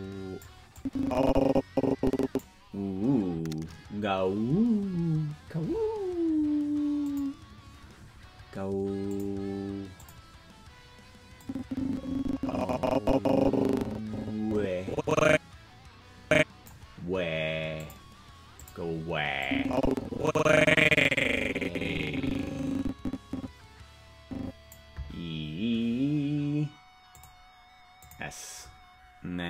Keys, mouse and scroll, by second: 0.7-2.4 drag, 7.0 click, 9.1 click, 9.9 click, 11.4-16.7 drag, 17.8 click, 18.5 click, 19.4-24.7 drag, 27.1 click, 27.9 click.